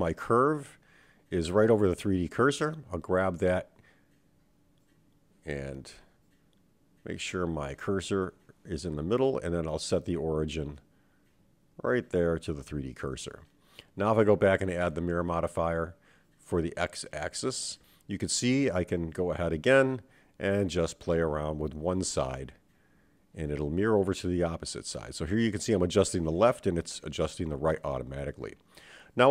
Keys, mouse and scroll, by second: 1.0 Tab, 2.0 right click, 4.9 shift+s, 7.3 click, 8.4-12.1 right drag, 14.8-16.2 drag, 19.0 click, 20.0 click, 21.2 Tab, 22.2 click, 23.9 g, 27.4 click, 27.7 g, 29.1 click.